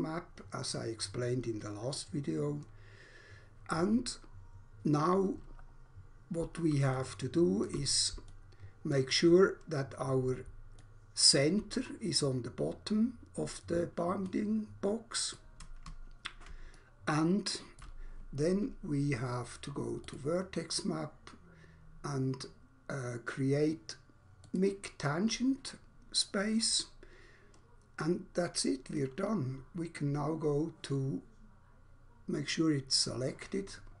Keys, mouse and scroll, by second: 5.5 scroll down 1, 6.9 alt+shift+click, 9.4 scroll up 1, 10.7 alt+click, 14.2 alt+click, 16.7 alt+shift+click, 20.1 click, 24.4 click.